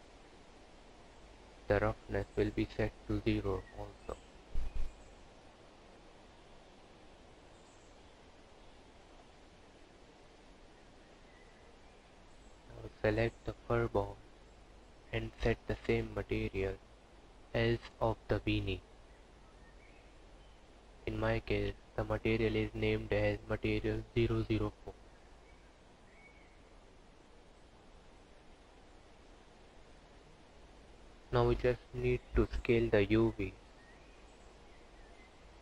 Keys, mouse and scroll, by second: 1.4 click, 12.0 click, 14.2 click, 19.2 click, 25.1 click, 28.2 click, 28.8 scroll up 4, 30.0 click, 31.1-31.5 scroll down 2, 32.1 click, 33.6 Tab.